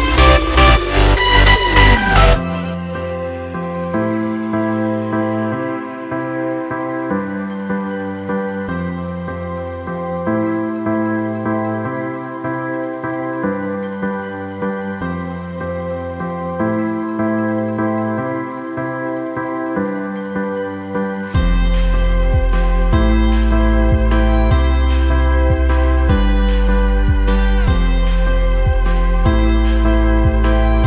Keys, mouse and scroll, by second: 0.0-1.1 drag, 1.4 click, 1.7 click, 2.2 drag, 2.5 click, 3.0-4.0 middle drag, 3.0-3.7 scroll, 4.0-4.4 scroll down 2, 4.4-5.3 middle drag, 4.4 scroll, 5.3-16.6 drag, 19.3-21.2 drag, 21.3-30.8 drag.